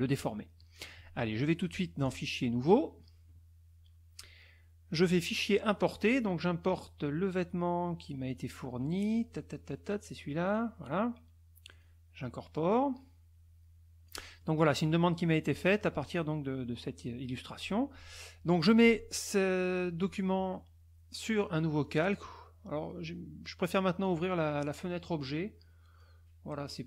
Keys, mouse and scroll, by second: 0.6 middle click, 0.7 click, 2.0 click, 2.6 click, 4.9 click, 6.0 click, 8.3 click, 9.1 click, 10.4 click, 11.7 click, 12.5-14.2 drag, 14.6 middle click, 15.7 middle click, 21.8 click, 24.0 click, 26.0 click.